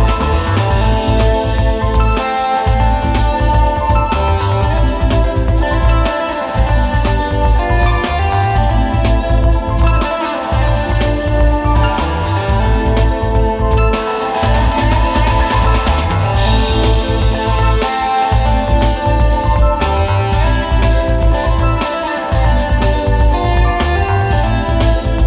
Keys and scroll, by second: 0.0 space, 0.2 space, 1.7 space, 2.1 space, 2.8 space, 3.7 super+z, 8.5 space, 8.8 space, 10.0 space, 10.3 space, 10.6 space, 12.0 space, 14.9 space, 15.3 space, 16.8 space, 17.4 super+space, 17.9 super+space, 18.8 space, 20.2 super+x, 22.0 space, 22.8 space, 23.7 space, 24.0 space.